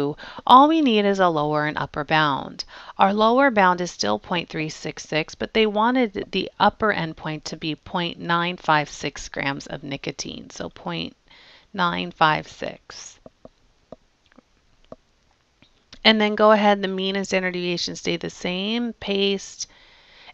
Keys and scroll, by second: 3.9 Down, 10.8 ., 11.7 9, 12.3 5, 12.8 6, 17.1 Down, 17.6 Down, 18.0 Down, 19.0 Return, 19.7 Return.